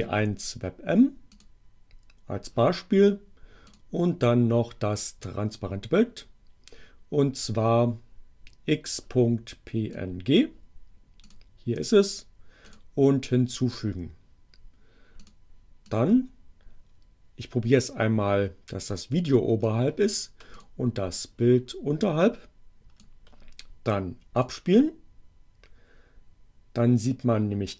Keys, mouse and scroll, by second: 1.3 click, 3.7 click, 9.8-10.6 drag, 11.2 click, 12.7 click, 15.2 click, 15.7-19.9 drag, 20.5 click, 21.2-23.2 drag, 24.4 click.